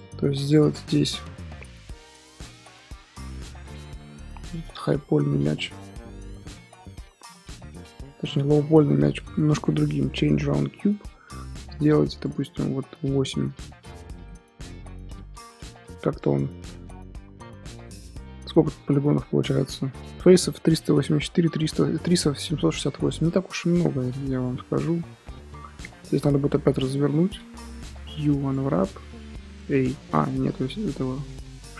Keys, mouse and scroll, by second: 2.0 scroll up 2, 3.0 Tab, 3.4 Tab, 4.4 click, 4.9 z, 7.2 drag, 7.5 middle click, 7.8 Tab, 8.7 Tab, 10.4-12.2 right drag, 12.2-13.3 drag, 13.3-16.3 middle drag, 16.3 right click, 16.6-17.9 middle drag, 17.9 Tab, 18.4 Tab, 22.6-23.6 middle drag, 23.6 Tab, 24.3 click, 26.2-28.5 middle drag, 28.5 u, 29.8 ctrl+z, 29.9 middle click, 30.2-30.6 scroll up 6, 30.6 middle click, 31.3 2, 31.7 alt+click.